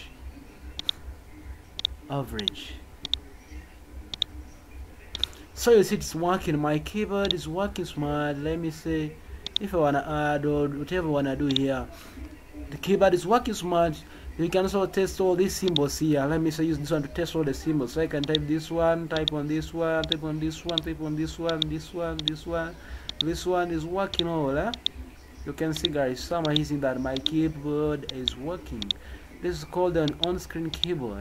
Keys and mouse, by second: 0.8 click, 1.7 click, 2.4 click, 3.1 click, 4.1 click, 5.2 click, 7.2 click, 18.2 click, 19.1 click, 20.0 click, 20.7 click, 21.5 click, 22.1 click, 23.0 click, 24.1 click, 24.7 click, 25.8 click, 26.4 click, 27.2 click, 28.1 click, 28.8 click, 30.0 click.